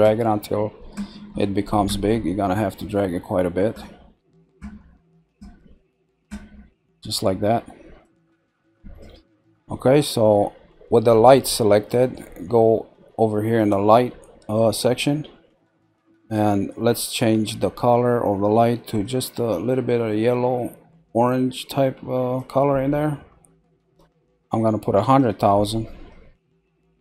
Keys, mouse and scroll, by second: 13.5 click, 17.1 click, 23.8 click, 24.0 middle click, 25.0-27.0 drag.